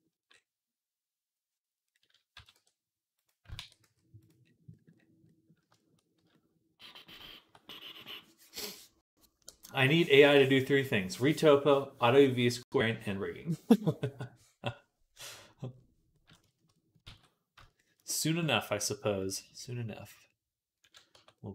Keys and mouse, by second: 2.2 s, 3.4 ctrl+a, 17.0 ctrl+s, 20.7 click, 20.7 middle click, 21.0 Tab.